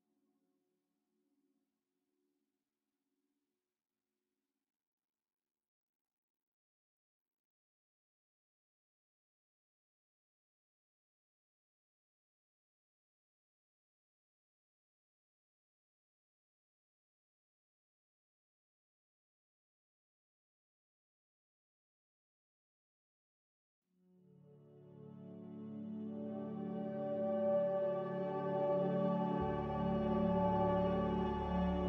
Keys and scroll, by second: 6.3 z, 9.8 c, 11.9 space, 19.6 z.